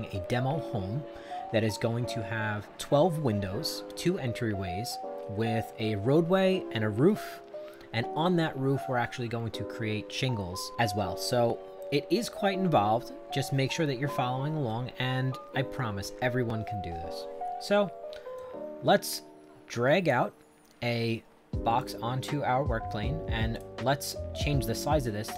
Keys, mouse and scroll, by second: 18.3-20.1 drag, 21.8 click, 23.5 click.